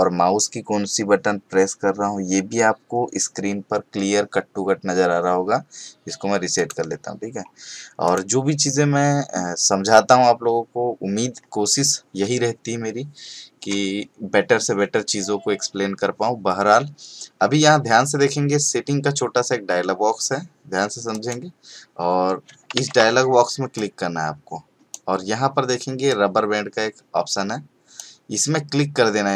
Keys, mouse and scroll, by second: 6.5 click, 21.1 click, 22.7 ctrl+shift+d.